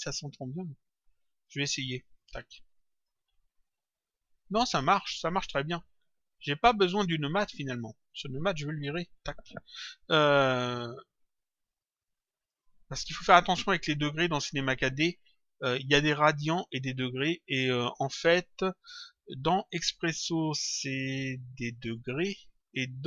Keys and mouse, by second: 1.0 click, 2.1 click, 5.3 click, 8.0 click, 9.1 Delete, 11.1 click, 15.4 click.